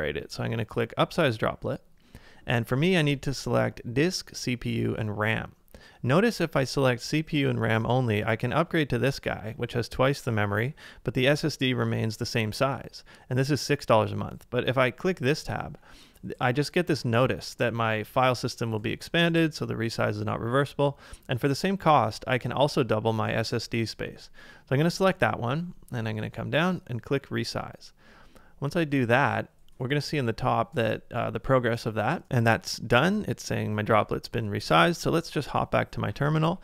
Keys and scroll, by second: 34.7 super+Tab.